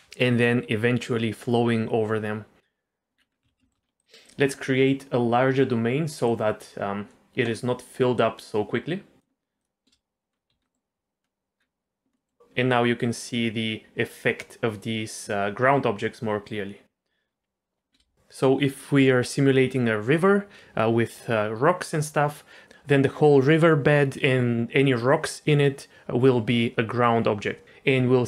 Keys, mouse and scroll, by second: 2.5 middle click, 3.1 scroll down 3, 3.4 z, 3.7 shift+middle click, 3.8-4.2 scroll up 2, 4.0 click, 6.2-7.5 drag, 8.1-9.2 drag, 9.6 click, 9.9 space, 10.3 scroll up 2, 10.5 z, 10.7 middle click, 11.2 scroll up 1, 11.6 scroll down 2, 12.2 middle click, 16.2 middle click, 17.9 space.